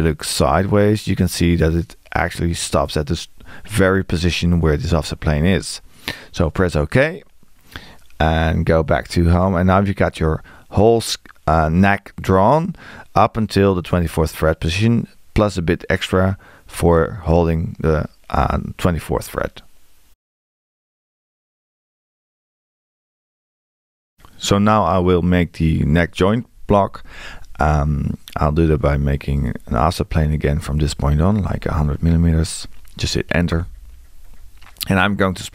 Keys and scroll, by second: 31.4 1.